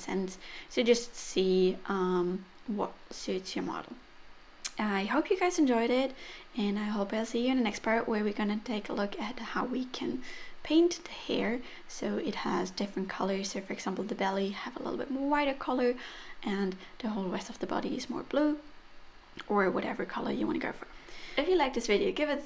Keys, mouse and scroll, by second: 0.0 middle click, 0.2 click, 0.7-1.1 scroll down 4, 0.9 click, 1.2 middle click, 1.4 click, 1.9 middle click, 2.1 click, 2.3 middle click, 2.6 click, 3.0 middle click, 3.6 scroll down 4, 3.7 middle click, 3.9-4.4 scroll up 3, 4.4 shift+middle click, 4.8 shift+middle click, 4.9 middle click, 5.3 shift+middle click, 5.5-6.8 scroll up 5, 6.0 shift+middle click, 6.9 click, 9.1 click, 11.2 click, 11.8 click, 13.4 middle click, 13.6 click, 15.4 f, 15.6 click, 17.1-17.8 scroll down 6, 17.3 middle click, 17.8 click, 18.2 scroll down 2, 18.3 middle click, 18.7-19.0 scroll up 5, 19.0-19.4 scroll down 3, 19.1 middle click, 19.7 scroll up 2, 20.0 middle click, 20.4 middle click, 21.0 click, 21.3 click, 21.4 middle click.